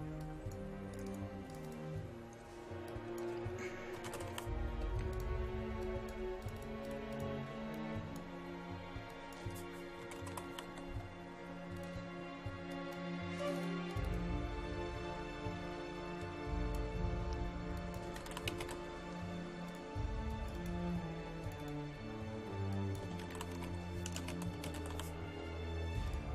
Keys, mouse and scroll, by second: 3.8-4.8 typing, 5.1 click, 9.1 click, 9.8-11.2 typing, 11.8-15.2 drag, 17.9-19.2 typing, 19.7 click, 20.9-21.5 scroll down 1, 21.5 click, 22.9-25.4 typing, 26.1 click.